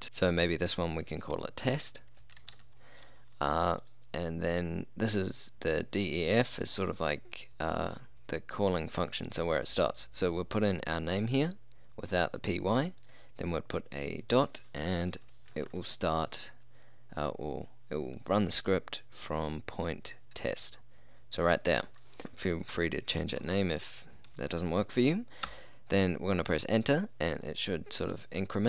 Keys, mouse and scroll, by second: 1.8 t, 2.2 e, 2.4 s, 2.5 t, 9.8-14.2 drag, 23.4-25.4 drag, 25.5 Return.